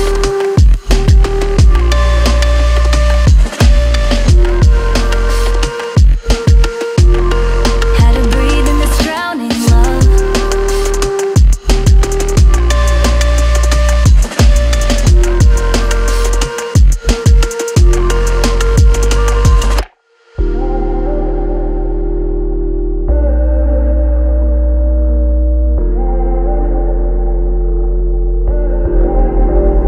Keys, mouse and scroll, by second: 4.1 ctrl+click, 5.1 Up, 6.9 ctrl+click, 10.6 right click, 23.4-25.3 typing.